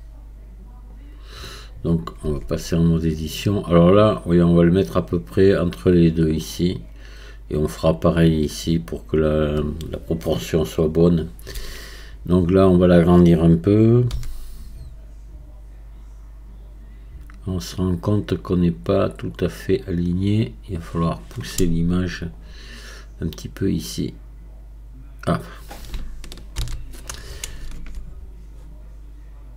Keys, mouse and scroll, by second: 22.2-29.5 drag.